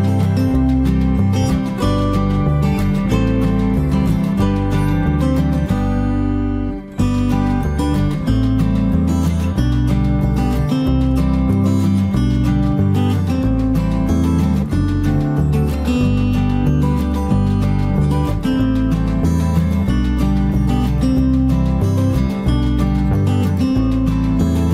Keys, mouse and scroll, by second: 0.1 right click, 0.6 click, 1.5 middle click, 1.9 ctrl+right click, 2.4 right click, 2.7 click, 3.3 click, 3.9 click, 4.1 f, 4.3 click, 6.8 ctrl+middle click, 7.5 middle click, 8.5 shift+middle click, 9.0 middle click, 9.6 middle click, 12.6 middle click.